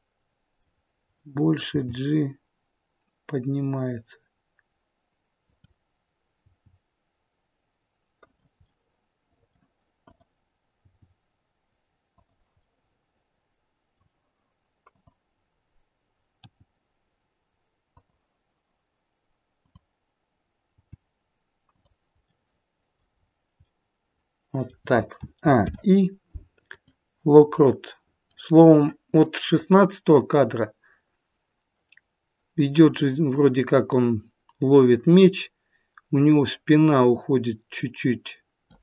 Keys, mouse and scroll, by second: 1.6 g, 6.3 g, 8.5 middle click, 9.9 click, 10.7 g, 12.5 middle click, 14.8 click, 16.4 g, 20.8 click, 20.8 g, 22.3 middle click, 23.1-25.2 scroll down 3, 23.6 middle click, 25.2 a, 25.6 i, 27.4-28.3 scroll up 1, 28.3 middle click, 28.3-29.6 scroll up 2, 29.6 click.